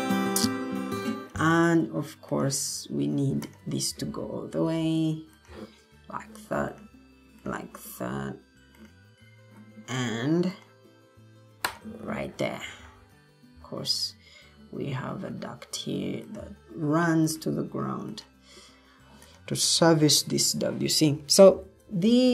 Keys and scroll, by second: 4.5 Escape.